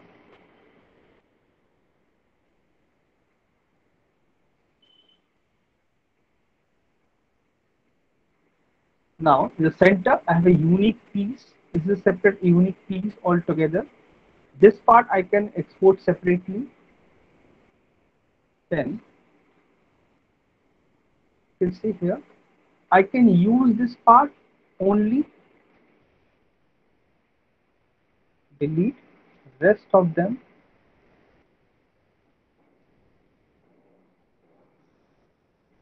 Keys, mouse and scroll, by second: 1.2 click, 6.0 alt+middle click, 6.8 middle click, 7.0 alt+middle click, 8.1 click, 8.8 Delete, 10.1 alt+middle click, 10.3 middle click, 13.9 alt+middle click, 18.3 middle click, 18.9 alt+middle click, 19.4 middle click, 19.8 middle click, 20.5 alt+middle click, 22.2 middle click, 23.1 alt+middle click, 26.2 middle click, 28.4 click, 29.6 Delete, 31.1 click, 31.6 Delete, 32.3 click, 32.7 Delete, 33.8 click, 34.1 Delete.